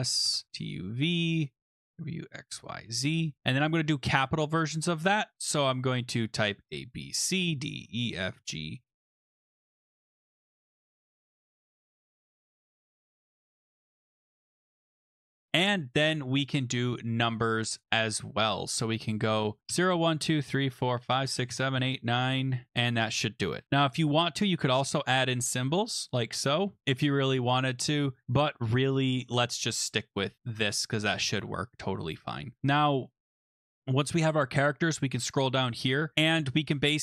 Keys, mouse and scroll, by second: 0.0-3.2 typing, 6.5-12.1 typing, 13.2-15.3 typing, 17.7 click, 18.9 click, 19.4-22.2 typing, 24.8-26.8 typing, 29.1 shift+click, 29.6 BackSpace, 33.6 click, 34.2 scroll down 7, 34.5-34.9 scroll, 35.6 click, 36.1 click.